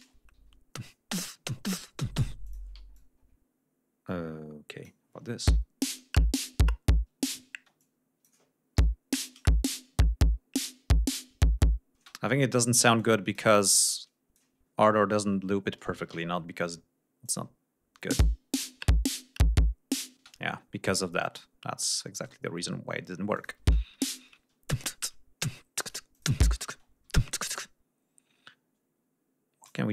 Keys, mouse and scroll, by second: 0.3 d, 1.9 g, 2.4 click, 2.9-4.9 ctrl+drag, 5.4 l, 7.5 space, 7.7-8.4 drag, 8.7 l, 11.9 space, 12.6-13.5 ctrl+drag, 13.9 ctrl+click, 14.5 ctrl+scroll down 2, 15.1 ctrl+scroll down 2, 16.0 alt+d, 17.1 click, 17.9 space, 20.1 space, 20.7 scroll down 1, 21.9 scroll up 1, 23.3 click, 23.5 space, 23.7 scroll down 1, 24.3 ctrl+space, 24.9 ctrl+scroll up 2, 25.7 click, 26.0 click, 26.2 space, 26.8 d, 27.4-29.8 drag.